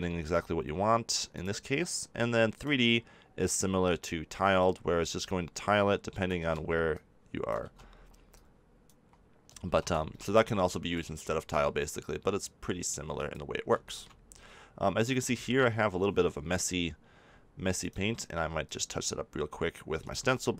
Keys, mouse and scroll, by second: 0.2-3.2 drag, 4.0 middle click, 4.5-6.3 drag, 6.3 ctrl+z, 6.6 middle click, 6.9-10.9 drag, 7.6 ctrl+z, 9.6 ctrl+z, 12.4 click, 17.7-19.6 drag, 19.6 middle click, 20.0-20.5 drag.